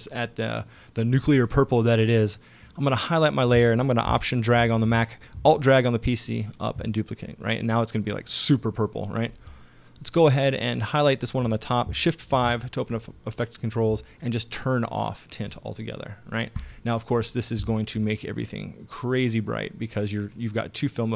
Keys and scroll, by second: 12.3 shift+5.